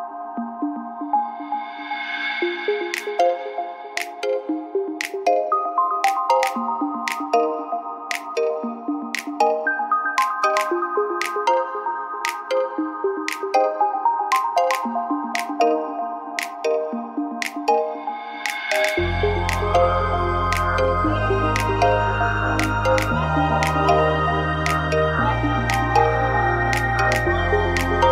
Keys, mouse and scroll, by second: 0.2 Tab, 0.8 z, 2.0 KP_3, 2.7 Tab, 4.6 shift+d, 5.0 click, 6.8 r, 10.6 z, 15.0 middle click, 16.2 shift+d, 21.5-22.6 middle drag, 23.2 shift+d, 23.4-24.5 drag, 25.8-26.9 middle drag, 26.9 click.